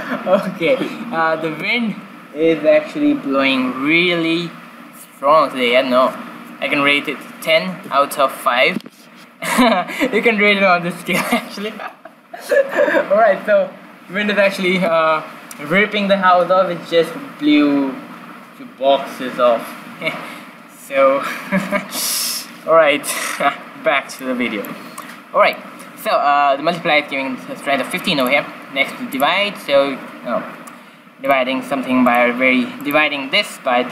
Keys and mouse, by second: 24.1 middle click, 25.0-26.8 drag, 28.1-29.9 drag, 31.2-33.9 drag.